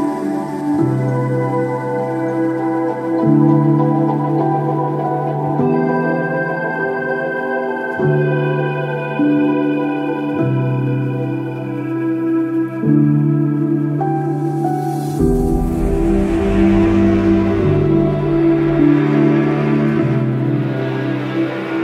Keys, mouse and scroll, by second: 0.2 shift+click, 0.6 shift+middle click, 0.9 shift+click, 1.2 shift+click, 2.0 shift+middle click, 2.2 shift+click, 2.5 shift+middle click, 2.6 shift+click, 3.0 shift+click, 3.4 shift+click, 3.7 shift+click, 4.4 c, 5.0-6.0 shift+drag, 6.2 shift+click, 6.4 middle click, 6.6 shift+click, 7.1 shift+click, 7.6 ctrl+s, 7.8 shift+middle click, 8.0 shift+click, 8.3 shift+middle click, 8.5 shift+click, 9.2 shift+click, 9.5 shift+click, 10.1 shift+right click, 10.5 shift+click, 11.3 ctrl+shift+click, 12.1 shift+click, 12.5 shift+click, 13.2 shift+click, 13.5 shift+click, 13.9 shift+click, 14.6 shift+click, 14.7 shift+click, 15.1-16.1 ctrl+shift+drag, 16.2 shift+click, 17.2 shift+click, 17.6 shift+click, 18.1 middle click, 18.2 middle click, 18.3 shift+click, 18.9 shift+middle click, 19.1 shift+click, 19.4 ctrl+shift+middle click, 19.9 shift+middle click, 20.0 shift+click, 20.3 shift+click, 20.6 shift+middle click, 21.3 ctrl+s, 21.5 middle click.